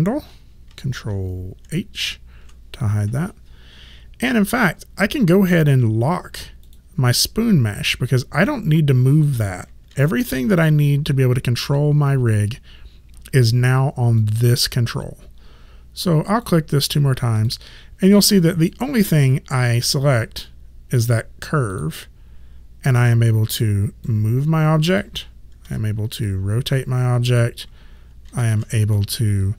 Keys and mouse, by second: 1.6 ctrl+h, 6.6 click, 9.9 ctrl+z, 14.2 click, 16.3 click, 21.0 click, 24.1 click, 25.6 e, 26.3 click, 28.3 ctrl+z.